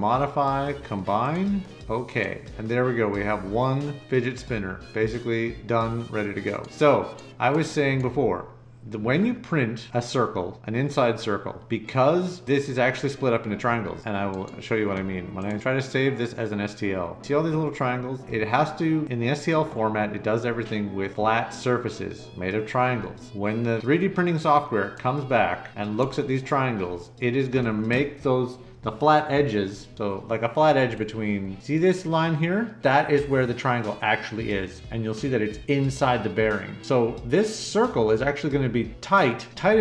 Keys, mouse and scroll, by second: 1.2 click, 2.2 right click, 25.3 right click, 30.9-31.3 scroll up 4, 31.4 scroll down 2, 39.5 middle click, 39.5-39.8 scroll up 8, 39.7 middle click.